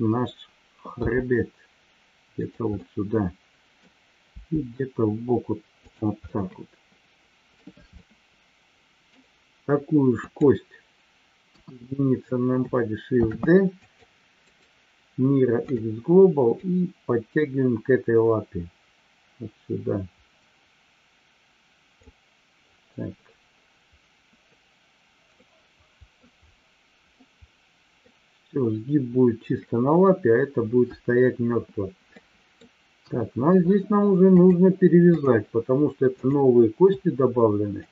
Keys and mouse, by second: 2.4 click, 2.8-3.8 middle drag, 5.8 click, 6.4-7.7 middle drag, 7.9-9.1 middle drag, 10.3 click, 11.4 KP_1, 13.1 shift+d, 13.7 click, 16.7-22.0 drag, 25.4-26.1 middle drag, 27.1 middle click, 32.1-32.7 middle drag, 32.9 KP_1, 34.3-35.7 drag, 37.7 shift+click.